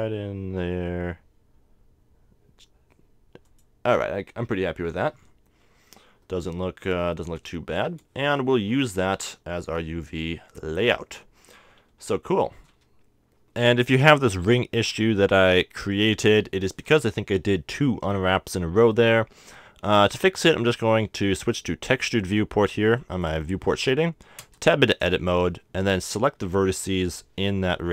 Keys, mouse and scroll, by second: 5.1 click, 5.8-10.7 middle drag, 12.0 a, 12.9 Tab, 13.3-18.5 drag, 18.7-21.1 middle drag, 21.1 scroll down 1, 21.9 click, 24.9 Tab, 25.5 a, 26.6 c.